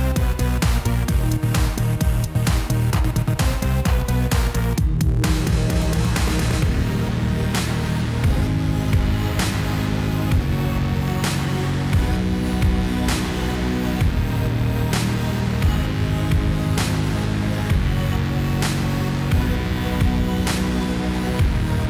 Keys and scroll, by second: 4.4 alt+a, 19.8 Tab.